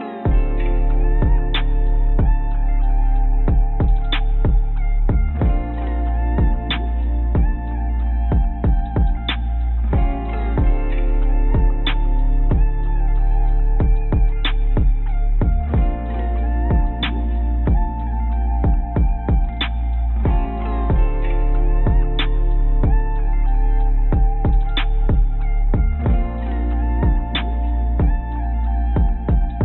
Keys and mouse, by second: 0.1 click, 0.8 middle click, 1.8 click, 4.1-5.5 middle drag, 5.5 click, 12.0 click, 16.6 Tab, 18.4 shift+a, 24.0 s, 27.6 g.